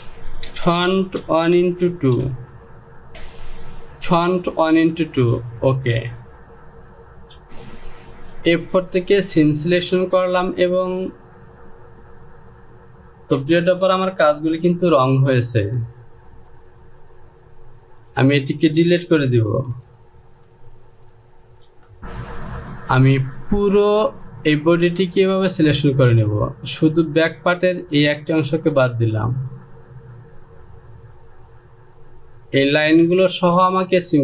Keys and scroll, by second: 1.0-3.3 typing, 3.1 Right, 15.3 j, 20.8 shift+z, 21.4 shift+z.